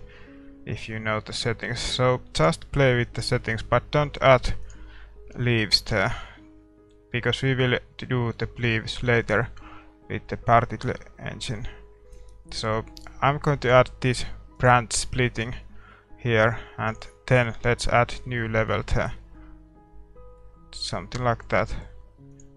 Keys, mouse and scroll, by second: 0.9-14.7 drag, 17.2-18.6 drag, 18.2-22.5 middle drag.